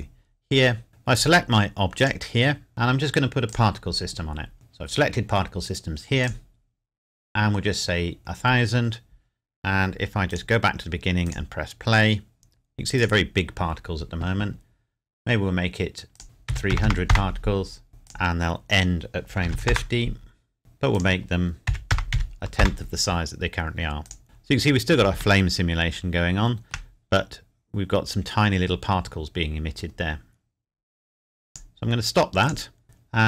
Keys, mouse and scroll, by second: 3.5 click, 4.5-5.4 scroll up 1, 6.2 click, 10.3 click, 16.1 click, 16.5 KP_3, 17.1 KP_Enter, 18.1 click, 19.4 KP_5, 19.7 KP_Enter, 20.6 click, 21.3 click, 21.7 KP_Decimal, 21.9 KP_0, 22.1 KP_1, 22.6 KP_Enter, 24.1 click, 25.4 shift+middle click, 27.1 scroll up 1, 29.8 scroll down 1, 31.5 click, 32.8-33.2 scroll up 1.